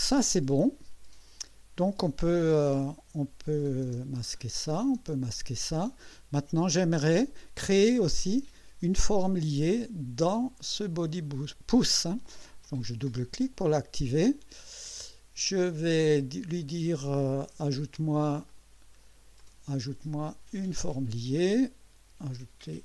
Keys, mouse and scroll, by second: 2.8 click, 3.9 space, 4.7 click, 5.0 space, 12.6 click, 17.6 click, 18.5 click, 19.4 click, 20.8 click, 22.3 click.